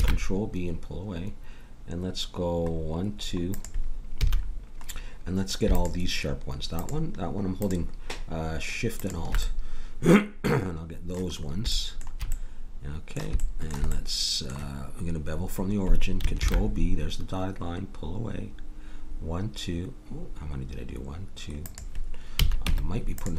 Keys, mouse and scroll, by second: 4.2 a, 5.7-10.1 drag, 9.4-11.0 middle drag, 9.4 right click, 16.4 ctrl+b, 22.3 a, 22.6 Tab.